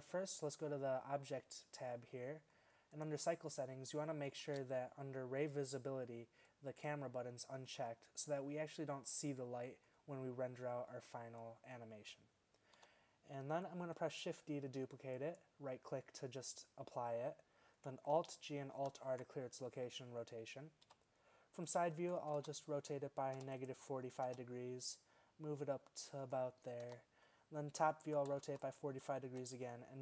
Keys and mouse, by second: 2.3-4.0 drag, 4.6 shift+z, 12.8 z, 14.3 shift+d, 18.2 alt+g, 18.8 alt+r, 20.9 KP_3, 22.0 r, 24.3 g, 26.9 KP_7, 28.1 r, 29.3 g.